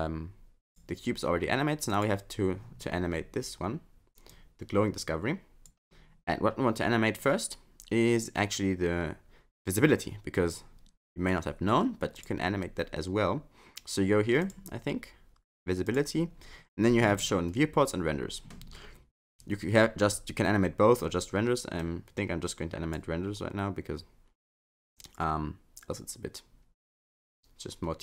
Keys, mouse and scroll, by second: 0.7 click, 1.9 click, 4.3 click, 12.2 click, 14.4 click, 15.9 click, 16.4-19.8 scroll down 1, 19.8-20.9 scroll down 1, 21.8 click.